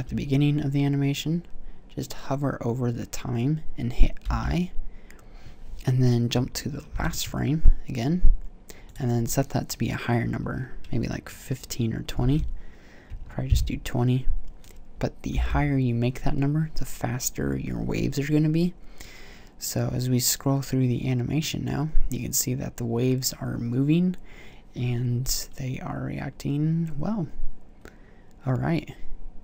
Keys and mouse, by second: 4.5 i, 7.5 shift+Right, 15.6 i.